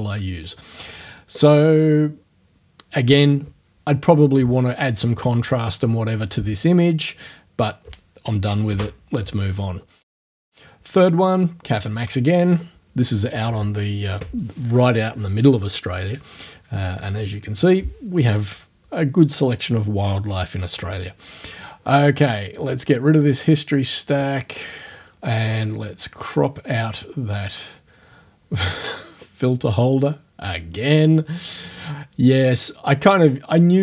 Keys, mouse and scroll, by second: 0.5 click, 23.4 click, 26.2 click, 27.6 click, 29.2-30.0 scroll up 1, 30.0-32.0 drag, 32.0-32.3 scroll up 1, 32.3-33.8 drag.